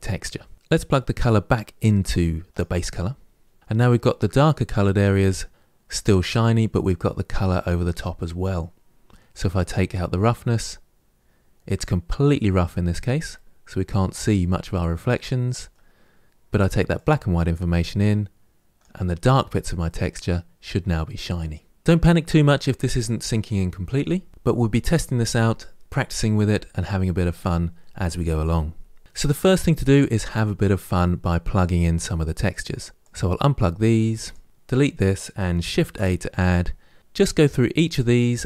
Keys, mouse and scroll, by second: 2.4-3.2 drag, 3.9-6.8 middle drag, 10.3-13.1 drag, 13.1-18.6 middle drag, 18.6-19.6 drag, 19.6-21.8 middle drag, 32.9 click, 34.2 click, 34.5 Delete.